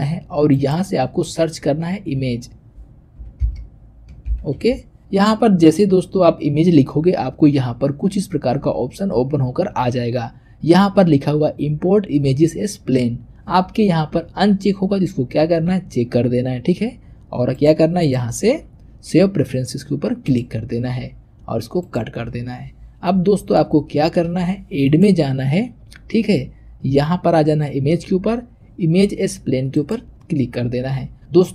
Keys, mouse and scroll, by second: 23.5-24.8 shift+middle drag, 24.8-27.8 drag.